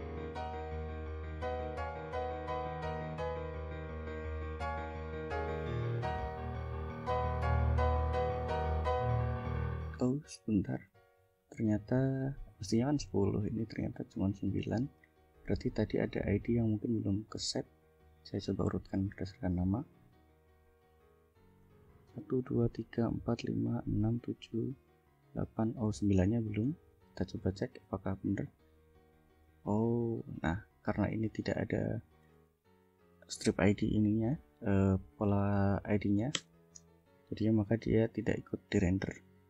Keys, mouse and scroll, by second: 1.4 click, 5.3 click, 6.0 click, 8.0 click, 9.4 click, 10.9 click, 11.4 click, 13.1 click, 13.6 click, 14.5 click, 15.1 right click, 16.0 right click, 17.3 right click, 21.0 click, 21.7 click, 26.7 click, 27.3 scroll down 2, 27.9 click, 28.5 click, 30.4 click, 32.1 Left, 33.2 ctrl+v, 36.5 Return, 38.0 click, 38.8 click.